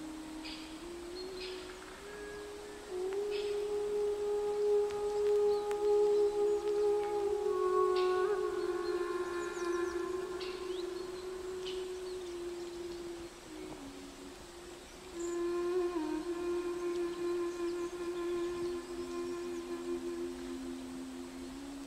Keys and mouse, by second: 2.5-4.5 drag, 5.1-6.7 drag, 7.4-8.8 drag, 12.0-14.3 drag, 14.9-16.0 drag, 19.0 ctrl+s, 19.3 click, 20.3 middle click, 20.3 0.